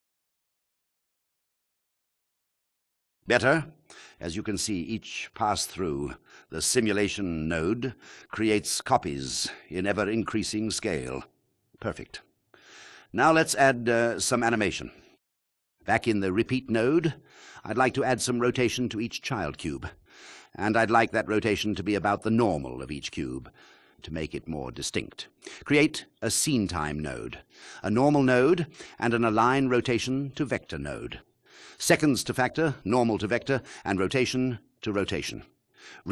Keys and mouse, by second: 0.6 click, 3.4 click, 8.5 click, 21.5 shift+a, 24.3 click, 25.6 shift+a, 30.1 shift+a, 34.9 click.